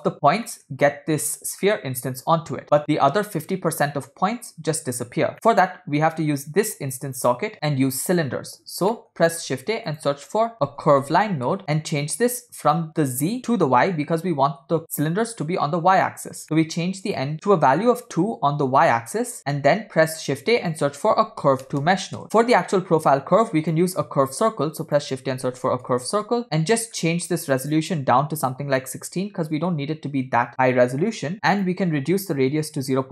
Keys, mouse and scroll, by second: 0.4 scroll down 1, 0.5 middle click, 1.6 scroll up 3, 2.6 scroll down 3, 2.8 middle click, 5.3 middle click, 5.3 scroll up 1, 6.2-7.1 drag, 9.0 shift+middle click, 9.2 shift+a, 11.6 middle click, 12.7-14.5 drag, 16.4 middle click, 16.5 scroll up 1, 17.1 click, 19.4 middle click, 19.4 scroll down 2, 19.7 shift+a, 22.4 scroll up 2, 23.1-23.8 drag, 24.2 shift+a, 26.7 middle click, 27.0 scroll up 2, 27.7-29.6 drag, 31.6-33.1 drag.